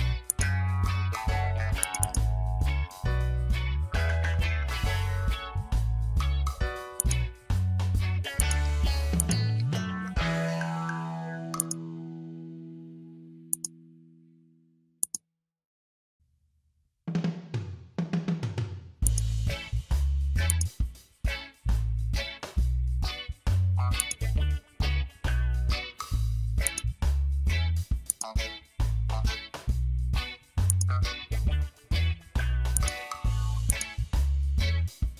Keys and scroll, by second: 2.6 Return, 11.4 space, 25.4 ctrl+z, 26.5 space.